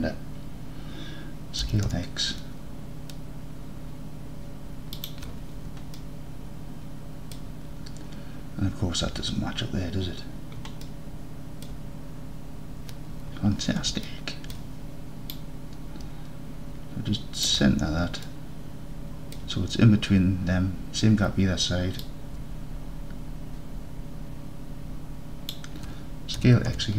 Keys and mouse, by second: 1.7 s, 1.9 x, 5.0 shift+click, 6.0-7.4 alt+drag, 10.9-11.7 alt+drag, 14.1-14.6 alt+drag, 15.4 click, 15.7-17.5 middle drag, 18.3-19.4 alt+drag, 22.1-25.5 middle drag, 26.5 s, 26.7 x.